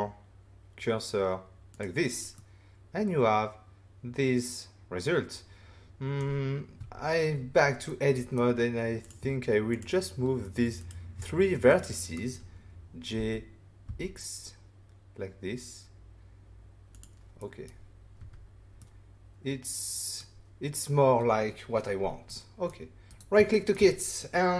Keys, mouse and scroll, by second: 1.7 click, 2.3 middle click, 6.7 Tab, 7.8 middle click, 9.0 click, 9.7 shift+click, 10.8 click, 11.6 middle click, 13.1 g, 13.8 x, 16.9 click, 17.4 middle click, 18.1 Tab, 18.8 middle click, 22.2 middle click, 23.0 right click, 23.5 shift+middle click.